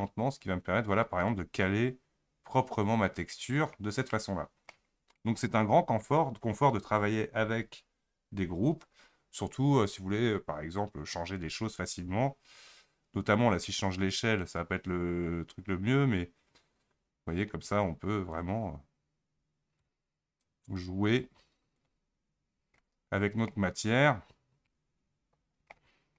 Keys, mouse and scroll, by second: 3.7 scroll up 1, 3.7-4.1 scroll down 2, 4.1-14.7 middle drag, 14.7-22.2 drag, 22.2-22.8 scroll up 7, 22.8-23.5 middle drag, 23.5 scroll up 1, 24.2-24.7 scroll down 3, 24.7-26.1 middle drag.